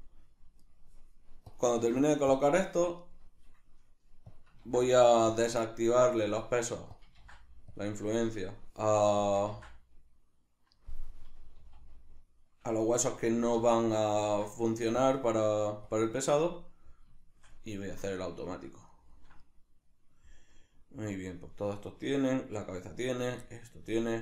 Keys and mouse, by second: 0.7 right click, 1.5-3.0 drag, 3.0 right click, 6.0 right click, 6.9-8.4 drag, 8.4 right click, 9.2-10.8 drag, 9.5 ctrl+v, 10.8 middle click, 11.2 middle click, 11.6-13.5 middle drag, 11.6 z, 13.4 z, 14.3-15.0 ctrl+middle drag, 15.0-16.5 drag, 16.5-21.3 middle drag, 21.9-22.6 middle drag, 22.6 right click, 23.1 right click, 23.5-24.2 middle drag.